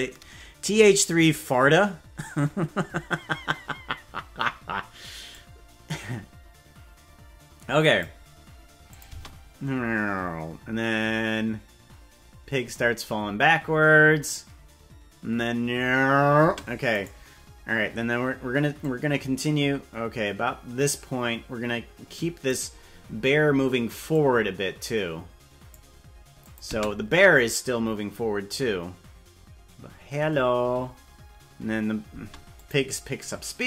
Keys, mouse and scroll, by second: 5.3-8.0 drag, 8.9 click, 9.2 space, 16.4 space, 17.0 right click, 18.8-22.5 drag, 24.1-25.7 drag, 26.4 click, 26.7 space, 32.1 space, 32.5 click, 33.2-33.6 drag.